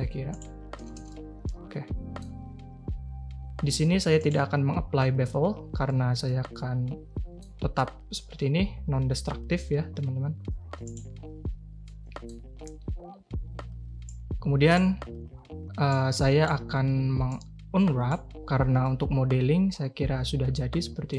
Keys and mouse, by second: 0.7 a, 0.9 a, 1.1-2.1 drag, 4.1 click, 6.2-7.4 drag, 10.8 click, 11.8-12.2 middle drag, 14.0 click, 15.9 click, 17.3 click, 18.8-21.1 middle drag.